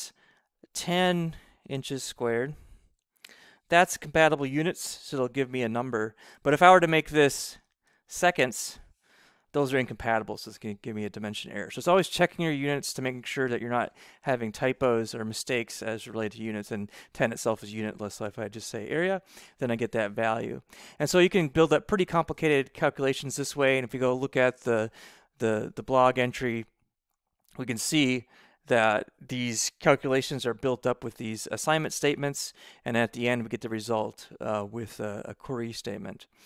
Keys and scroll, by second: 0.7-3.5 typing, 3.9 Right, 4.7 ], 7.2 BackSpace, 8.1 s, 8.5 c, 14.2 Right, 15.8 BackSpace.